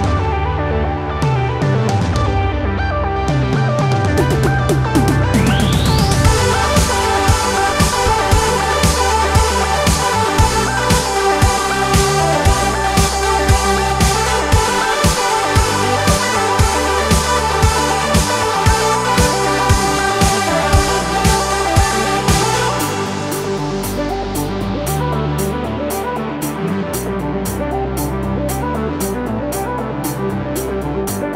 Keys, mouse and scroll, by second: 1.6 click, 8.5 click, 13.2-17.3 drag, 17.3-17.7 alt+scroll up 1, 19.3 click, 20.9 alt+scroll up 1, 22.9 alt+scroll down 1, 24.8 scroll up 1, 26.9 click, 28.1 right click, 30.4 click.